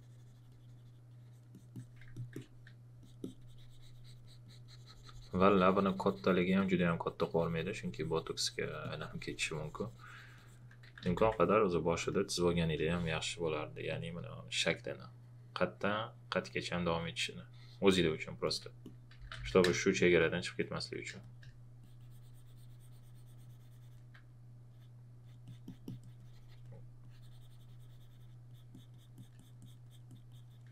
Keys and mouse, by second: 10.6-12.5 typing, 12.0 click, 13.8 space, 13.9 click, 18.4 alt+click, 18.9-19.9 typing, 20.2 click, 20.6 alt+click, 21.1 space, 21.2 click, 24.6 alt+Num_Lock, 24.6 click.